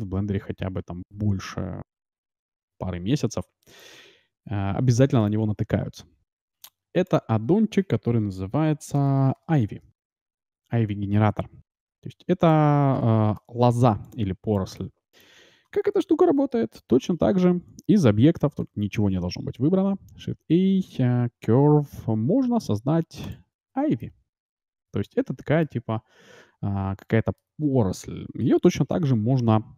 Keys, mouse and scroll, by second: 3.7-11.5 drag, 13.0-16.1 middle drag, 14.0-16.8 drag, 17.0 shift+a, 18.4 a, 18.6 a, 19.1 a, 19.8 shift+a, 24.0-27.4 middle drag, 29.4 F6.